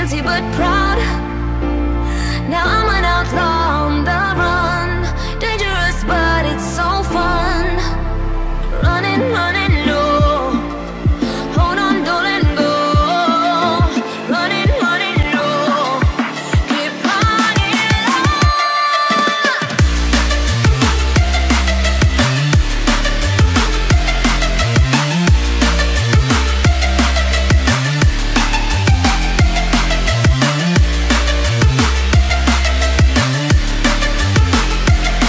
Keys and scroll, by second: 12.3 ctrl+i.